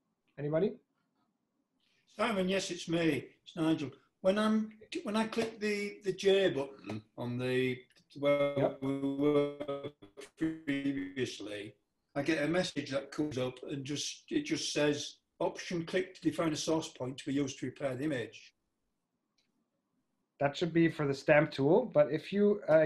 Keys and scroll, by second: 6.7 super+Tab, 9.8 j, 13.0 j.